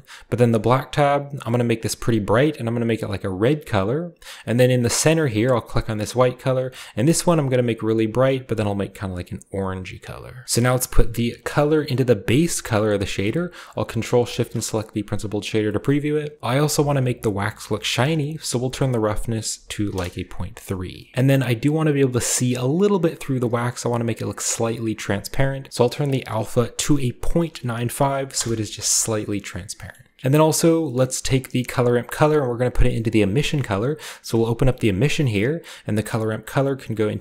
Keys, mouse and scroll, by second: 0.7-1.8 scroll down 1, 1.8-4.5 drag, 4.9 click, 6.1 click, 7.3 click, 7.8-8.1 drag, 9.5 click, 10.4 ctrl+v, 10.4-12.6 middle drag, 10.4-11.5 scroll down 1, 10.6-11.5 drag, 12.6 click, 13.0-14.3 ctrl+shift+drag, 14.4-15.8 ctrl+shift+drag, 15.8 middle click, 15.8-16.4 scroll up 1, 18.3-20.6 drag, 19.9 typing, 21.0 shift+middle click, 22.4-25.4 middle drag, 23.7-24.2 shift+scroll up 2, 24.2-24.9 shift+scroll down 2, 25.7-27.3 drag, 27.3-28.3 typing, 28.3 Return, 29.9 middle drag, 30.6 middle click, 30.7 scroll down 1, 30.9-31.3 scroll up 1, 31.0-31.5 middle drag, 31.3-32.3 drag, 32.2-34.3 scroll up 1, 32.3 middle click, 34.3 click, 35.5 click, 36.2-37.2 drag.